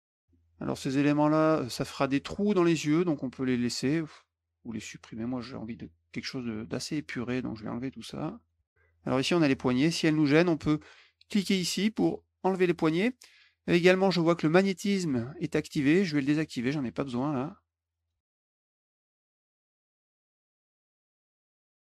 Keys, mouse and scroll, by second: 0.1 middle click, 1.4 click, 1.8 middle click, 3.3 click, 4.2 click, 5.5 click, 6.5-8.4 drag, 9.4 click, 12.4 click, 16.2 click, 17.5 click, 18.2 click, 18.3 click, 18.3 click, 18.5 middle click, 18.5 click, 18.6 click, 18.7 click, 18.8 middle click, 18.9 middle click, 19.1 click, 19.1 click, 19.3 click, 19.4 click, 19.5 click, 19.6 middle click, 19.8 click, 19.8 click, 19.9 click, 20.0 click, 20.1 click, 20.2 middle click, 20.3 middle click, 20.4 middle click, 20.6 middle click, 20.8 middle click, 20.9 click, 21.1 middle click, 21.3 middle click, 21.5 middle click, 21.7 middle click.